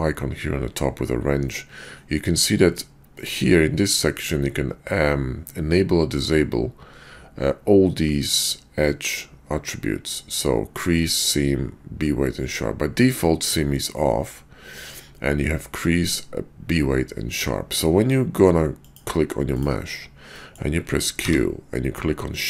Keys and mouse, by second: 20.3 click, 21.2 q.